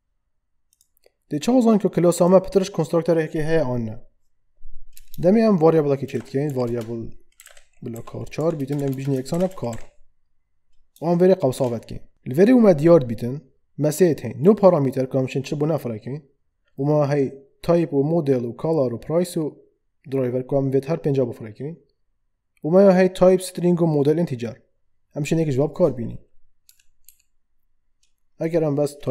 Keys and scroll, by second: 4.9 Return, 6.0-10.2 typing, 11.5 shift+9, 26.6 Down.